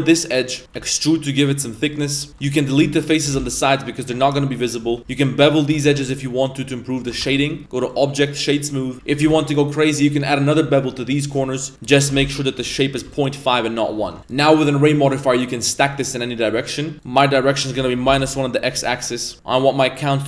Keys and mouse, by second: 0.6 a, 0.7 e, 2.1 middle click, 2.3 a, 2.3 s, 2.3 3, 2.5 right click, 3.1 shift+right click, 4.8 2, 5.2 shift+right click, 5.6 shift+right click, 6.0 ctrl+b, 7.2 Tab, 7.8 click, 8.7 middle click, 8.9 ctrl+b, 9.2 ctrl+b, 11.8-13.0 drag, 14.0 Tab, 14.3-14.9 drag, 17.0-18.2 drag, 18.9-19.3 middle drag, 20.0 click.